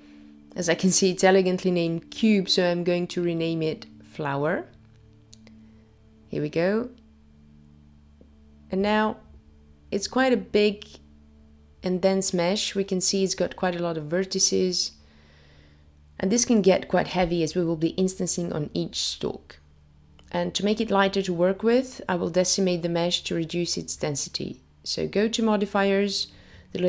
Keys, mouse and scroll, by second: 0.2-1.2 scroll down 4, 3.5 click, 4.9 click, 5.0 click, 10.1 click, 14.2 click, 16.7 click, 20.9 click, 26.4 click.